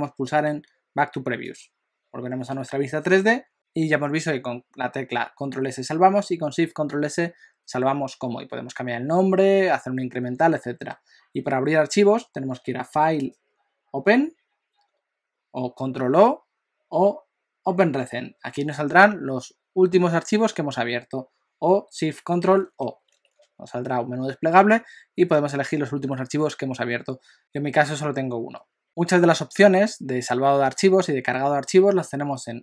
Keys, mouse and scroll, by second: 1.5 click, 23.1 ctrl+o.